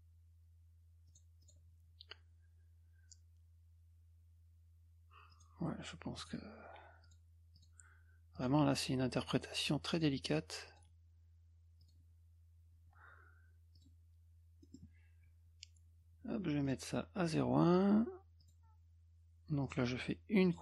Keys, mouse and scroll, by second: 1.1 click, 1.4 click, 5.3 click, 6.2 click, 7.0 click, 7.5 click, 8.3 click, 9.2 click, 9.9 click, 10.7 click, 11.8 click, 13.7 click, 14.6 middle click, 16.6 right click, 17.2 click, 18.4 click, 19.6 click, 20.4 click.